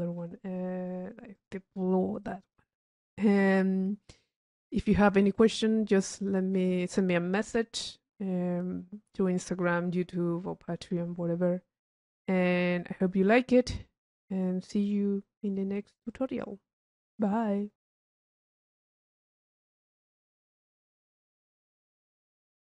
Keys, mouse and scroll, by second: 0.0 click, 1.5 click, 2.4 click, 6.4-7.7 drag, 12.7-13.9 middle drag, 14.4-17.7 middle drag.